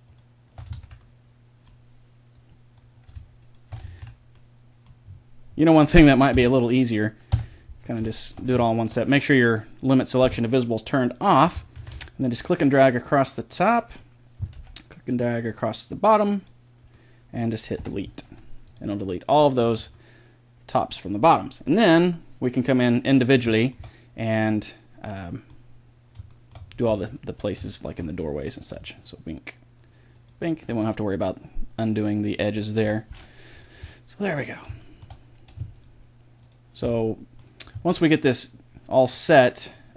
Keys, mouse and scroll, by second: 0.0 click, 0.7 ctrl+z, 2.0 middle click, 2.4 click, 3.4-4.4 middle drag, 3.9 ctrl+z, 4.5 middle click, 6.3 KP_1, 7.3 KP_5, 7.4 middle click, 11.8 a, 12.0 b, 14.5 b, 16.9 middle click, 17.9 Delete, 19.6 Tab, 23.5-27.7 middle drag, 26.8 Tab, 28.9-30.1 middle drag, 32.0 middle click, 32.8 Delete, 33.8 middle click, 37.0 middle click, 37.4-39.9 drag.